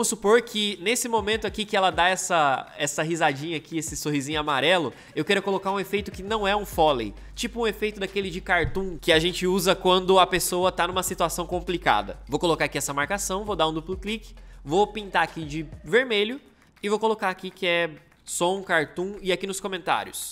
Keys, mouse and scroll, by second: 12.2 m, 17.9-19.0 typing.